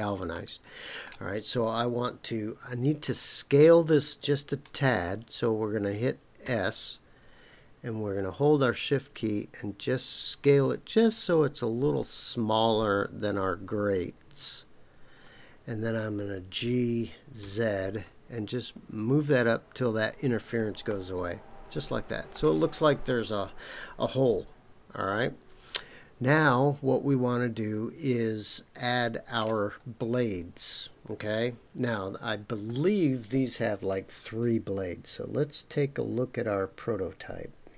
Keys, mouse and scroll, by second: 0.3 middle click, 6.4 s, 15.1 shift+click, 16.6 g, 17.4 z, 20.1 shift+click, 20.9-22.3 middle drag, 22.6 scroll down 2, 23.0-29.4 middle drag.